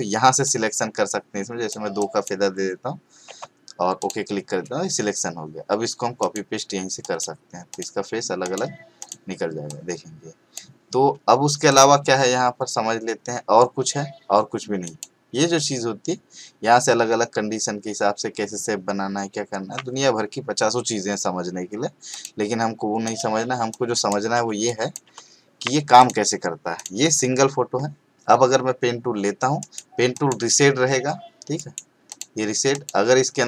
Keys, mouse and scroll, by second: 0.4-1.7 click, 3.3 2, 4.0 click, 6.2 click, 14.8 click, 22.1 click, 29.6 right click, 30.1 click, 31.6 right click, 32.1 click.